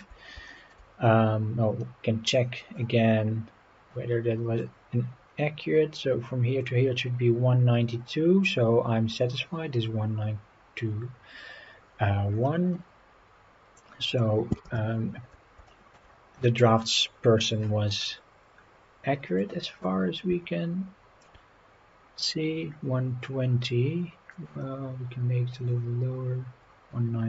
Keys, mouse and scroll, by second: 0.5 shift+middle click, 1.4-1.7 scroll up 4, 4.6-6.7 drag, 7.9-8.6 scroll up 6, 12.3-13.0 scroll down 6, 13.8-14.2 drag, 14.7 Delete, 15.7 shift+middle drag, 16.6 scroll up 4, 19.4-21.3 drag, 22.5-23.3 scroll up 4, 24.3 click.